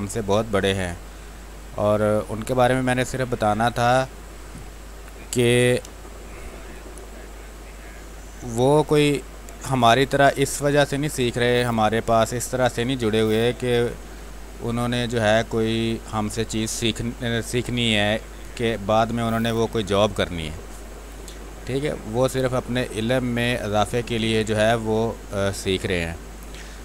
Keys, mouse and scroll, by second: 0.5 space, 0.6-3.1 drag, 3.1 space, 3.3 click, 3.6 space, 6.5 space, 8.5-9.9 drag, 10.2 click, 10.4 space, 11.5 click, 11.5 space, 12.3 alt+click, 13.8 space, 14.1 ctrl+click, 15.2 click, 16.4 ctrl+z, 16.8-19.3 ctrl+drag, 19.3 space, 19.5 click, 19.8 space, 20.1 x, 20.3 click, 21.3 x, 21.7-23.7 drag, 23.7 space, 23.9 click, 24.3 space, 24.8 click, 26.0 space, 26.3 click, 26.5 space.